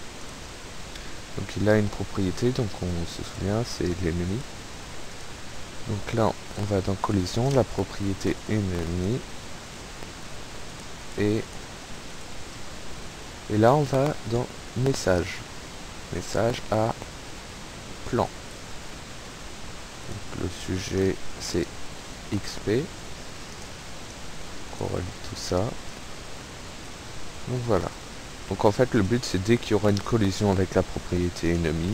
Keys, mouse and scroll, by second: 0.3 click, 3.2 click, 4.3 right click, 5.2 click, 6.5 click, 7.1 click, 7.4-9.4 typing, 10.7 click, 11.5 click, 12.2 click, 15.2 click, 16.0 click, 18.0 click, 19.6 click, 21.2-22.1 typing, 22.3-23.9 drag, 24.1 click, 26.0 click, 28.0 click, 29.1 click, 29.9 click, 31.3 click.